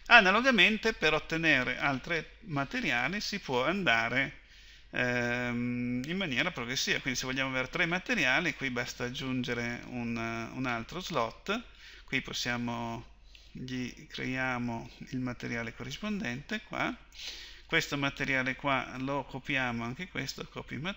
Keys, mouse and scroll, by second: 0.0 Escape, 9.7-20.9 drag.